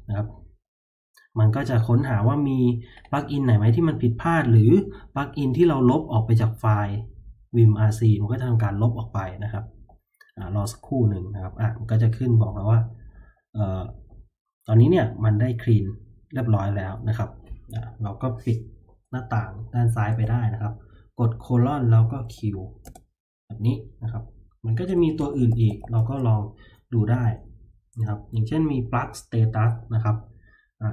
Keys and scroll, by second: 0.2 Return, 20.2 typing, 21.9-22.8 typing, 24.9-26.4 typing, 27.1 Tab, 27.4 Tab.